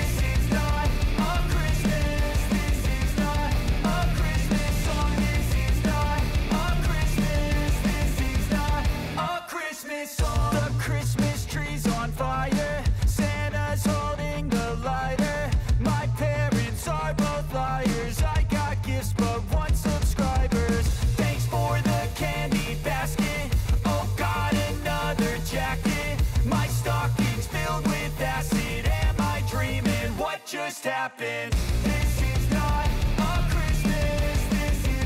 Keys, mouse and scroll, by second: 1.8-6.7 typing, 7.3 click, 9.3 ctrl+alt+Home, 11.0 click, 14.7 click, 19.5-22.4 drag, 24.3-25.3 typing, 26.4 click, 28.3 j, 28.9 click, 29.9 F9, 30.8-35.0 drag.